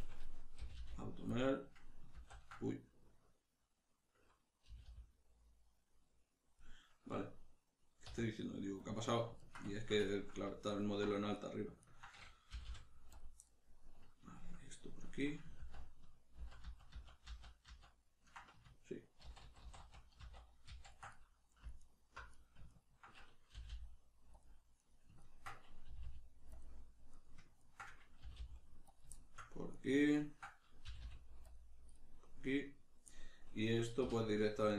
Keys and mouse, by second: 0.6 g, 1.3 click, 2.1 ctrl+z, 2.6-6.6 middle drag, 4.7 g, 6.6 click, 7.1-10.7 middle drag, 8.1 q, 10.7 alt+right click, 11.4 right click, 11.8 ctrl+right click, 12.5 g, 13.2 click, 13.4-21.8 middle drag, 15.6 ctrl+z, 19.2 ctrl+shift+z, 21.8 alt+right click, 22.3 right click, 22.7 ctrl+right click, 23.6 g, 24.4 click, 24.8 right click, 25.2 ctrl+right click, 25.9 g, 26.6 click, 27.1 right click, 27.6 ctrl+right click, 28.2 g, 29.0 click, 29.2 shift+middle click, 29.7 right click, 30.1 ctrl+right click, 30.8 g, 31.5 click, 31.9-34.3 middle drag, 34.0 3, 34.3 right click, 34.7 ctrl+right click.